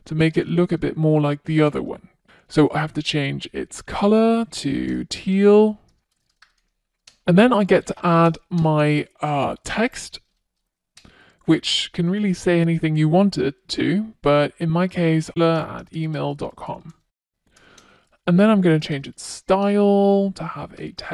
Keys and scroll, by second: 1.6 Return, 5.5 Return, 17.7 Return.